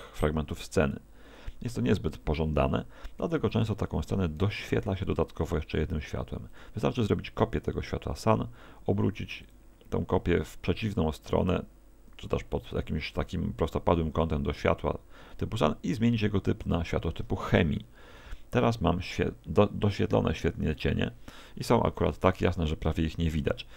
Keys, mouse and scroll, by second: 3.4 Escape, 4.4 shift+d, 6.6 click, 8.3 r, 9.6 click, 16.7 click, 22.9 Escape.